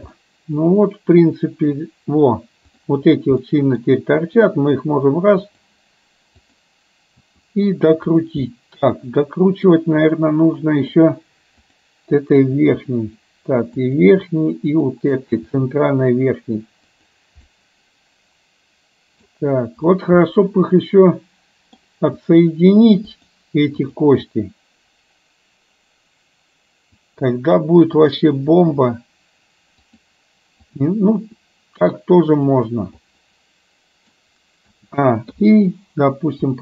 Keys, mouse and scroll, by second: 0.2-1.8 middle drag, 2.8 drag, 3.6 middle click, 4.3 r, 6.6 click, 8.6-9.8 middle drag, 10.3-10.9 middle drag, 11.7 click, 12.3 r, 14.8 click, 15.6 r, 17.4-19.3 middle drag, 20.3-21.8 middle drag, 22.3 r, 23.9 click, 24.4 r, 28.1 click, 28.6 r, 30.8 click, 31.2 r, 33.1-34.2 middle drag, 35.4 i.